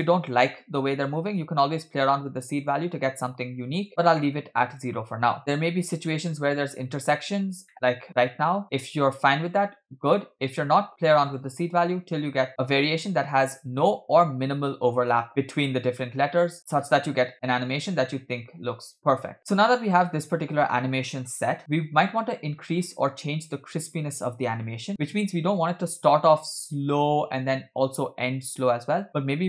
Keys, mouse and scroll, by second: 0.0 space, 2.3 click, 3.8 click, 5.4-6.5 drag, 5.4 space, 7.1-8.1 scroll up 4, 7.7 shift+middle click, 8.3 shift+middle click, 11.3 click, 12.2 scroll down 2, 12.5-13.1 drag, 13.2 space, 16.6-18.5 scroll down 2, 25.0 space, 26.5 click, 28.7 click.